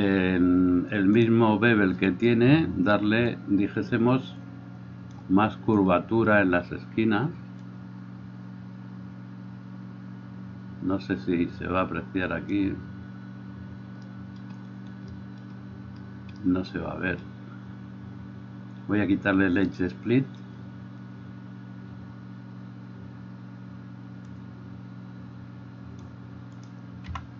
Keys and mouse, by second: 0.0-1.4 middle drag, 1.4 click, 1.6-3.7 middle drag, 3.7-26.9 drag, 26.9 middle click.